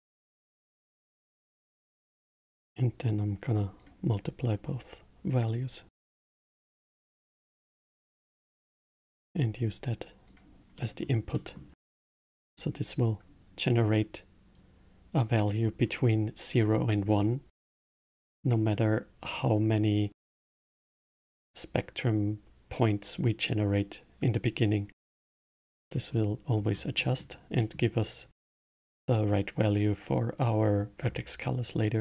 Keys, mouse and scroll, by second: 0.0-1.5 drag, 3.1 click, 4.7 click, 6.7 click, 7.5-9.3 drag, 10.7-13.6 middle drag, 13.6 click, 14.5-17.5 drag, 17.8-23.4 middle drag, 24.9-26.5 middle drag, 26.5-26.9 scroll down 1, 26.9-30.6 middle drag.